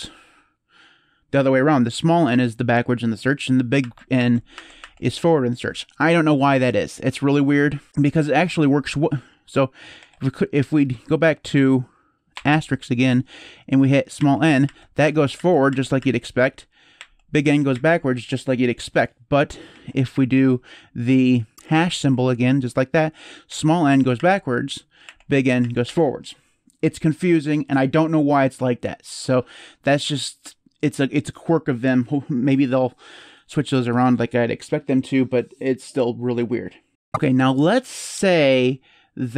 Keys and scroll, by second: 3.6 shift+n, 3.9 shift+n, 4.3 shift+n, 4.6 shift+n, 9.8 ctrl+s, 12.1 shift+8, 13.9-17.5 typing, 21.5 ctrl+s, 22.9-25.6 typing.